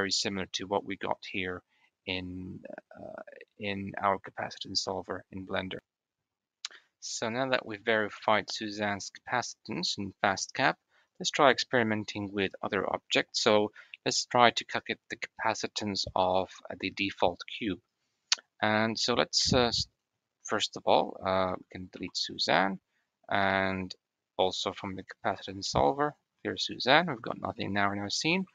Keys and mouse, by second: 17.9 click, 18.1 click, 20.0 click, 21.2 click, 21.8 x, 26.0 click, 27.4 drag, 28.3 shift+a.